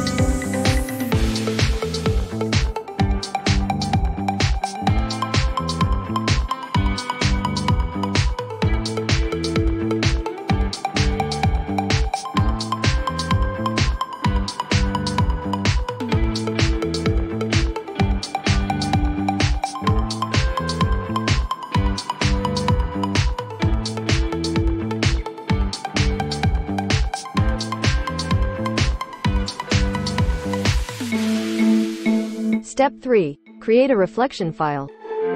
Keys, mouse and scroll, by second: 2.1-5.5 drag, 3.1-4.7 typing, 6.1 click, 8.9 click, 9.1-10.0 typing, 11.9-12.6 typing, 11.9 click, 15.8 click, 18.3 click, 20.2 click, 22.1 right click, 23.3 click, 24.3-29.2 typing, 24.5-25.6 drag.